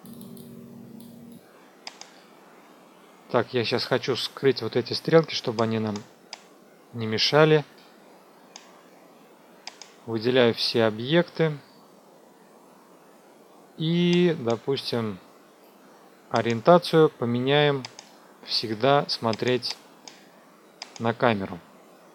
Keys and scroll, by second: 10.1 ctrl+a.